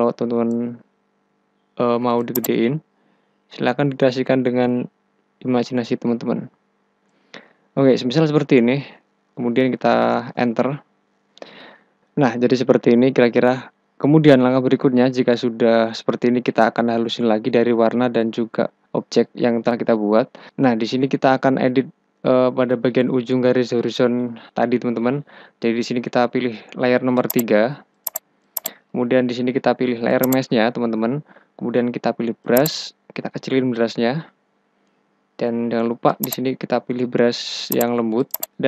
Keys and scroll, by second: 10.1 Return, 33.4 [, 35.4 [, 35.5 ].